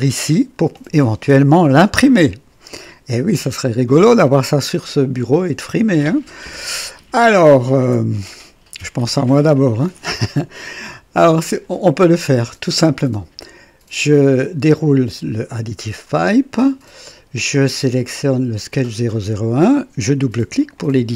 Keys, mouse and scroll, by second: 3.2-4.4 drag, 14.4 click, 18.0 click, 20.6 click.